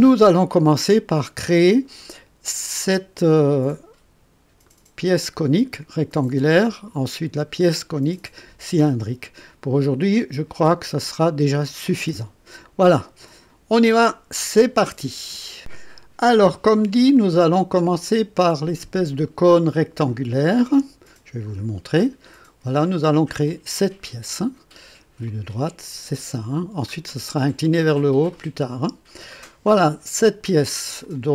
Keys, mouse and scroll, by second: 1.5 click, 2.8-3.7 drag, 4.6-7.0 drag, 8.8 click, 9.8 click, 11.8 click, 18.1 click, 20.1-22.0 drag, 22.7-24.4 drag, 25.3 click, 26.4 middle click, 31.0 click.